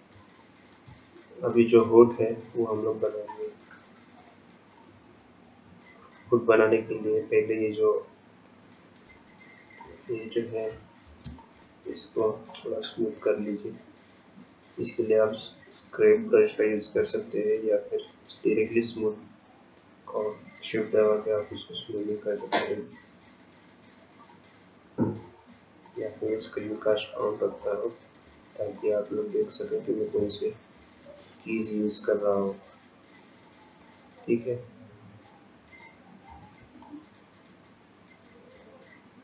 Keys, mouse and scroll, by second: 27.6 click, 28.8 shift+click, 36.9 shift+click.